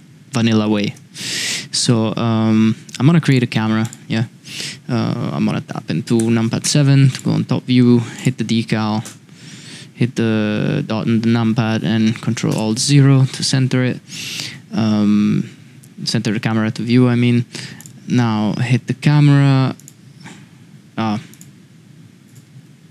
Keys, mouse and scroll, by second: 0.3 middle drag, 0.8 shift+a, 3.8 click, 6.2 KP_7, 7.1 click, 8.1 click, 9.0 KP_Decimal, 12.5 ctrl+alt+KP_0, 21.3 click.